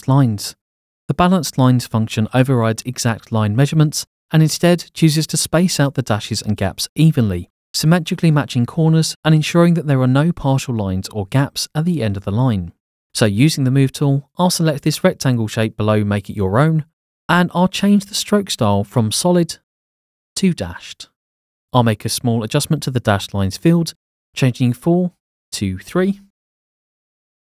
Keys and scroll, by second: 26.5 3.